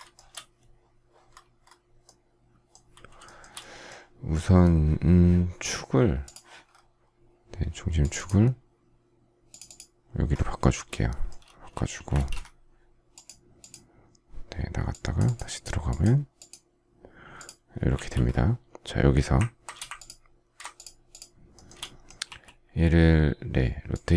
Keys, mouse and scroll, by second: 0.0 shift+middle click, 3.1 shift+middle click, 10.4 shift+middle click, 11.2 space, 11.9 Escape, 19.8 ctrl+click, 20.6 shift+click, 21.0 shift+click, 21.4 shift+middle click, 22.1 q.